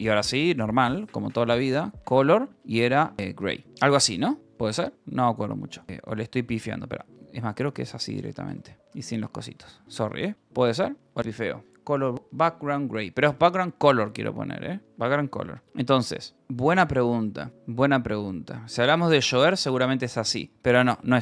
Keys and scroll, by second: 0.0-3.8 typing, 5.0-10.3 typing, 10.2 Escape, 12.5-21.2 typing, 16.6 Return.